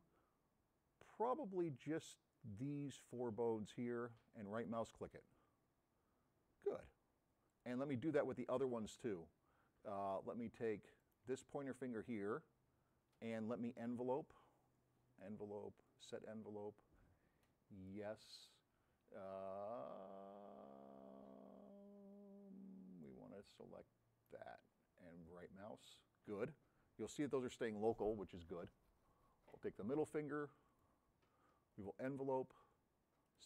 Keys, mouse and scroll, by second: 1.8-3.6 drag, 4.5 right click, 7.6 click, 11.0 middle click, 13.2 scroll up 1, 15.2 drag, 17.4-18.3 drag, 23.1-24.3 middle drag, 25.3 right click, 29.4-31.0 drag, 31.7 click, 33.3 click.